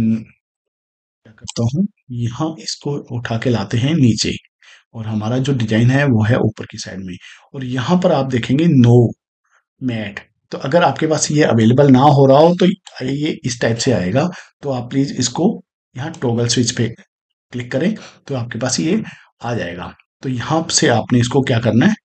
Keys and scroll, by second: 0.5 space.